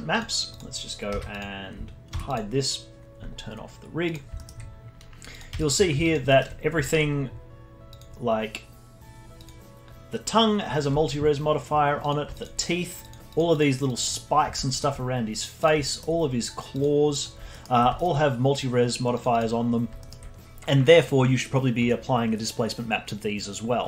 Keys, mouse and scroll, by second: 0.5 click, 1.1 z, 2.1 h, 2.3 click, 4.0 click, 4.3 alt+middle click, 5.3 click, 5.5 f, 6.0 alt+click, 6.2 alt+middle drag, 6.5 scroll up 2, 6.8-7.9 alt+middle drag, 7.9 click, 9.3 click, 10.9 scroll down 2, 12.0 click, 12.3 alt+click, 13.3 click, 13.5 click, 13.8 click, 14.0 click, 14.3-14.6 scroll down 3, 14.6 alt+middle drag, 14.9-15.5 scroll down 4, 15.6 click, 15.8 alt+middle click, 16.1-16.5 scroll up 2, 16.7 click, 17.2 drag, 17.5-19.1 alt+middle drag, 19.1-19.5 drag, 19.5-20.0 scroll up 4, 20.0-22.1 alt+middle drag, 22.1-23.6 scroll up 1.